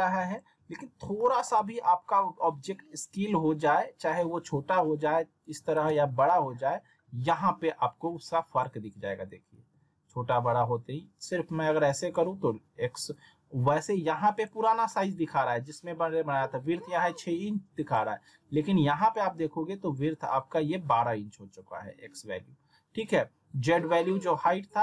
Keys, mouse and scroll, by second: 0.3 click, 1.1 middle click, 1.6 z, 2.7-3.1 scroll up 1, 3.8-4.4 drag, 5.7 ctrl+z, 8.1-8.7 drag, 9.5 ctrl+z, 11.2-12.2 drag, 12.9 ctrl+z, 14.4 click, 17.9 click.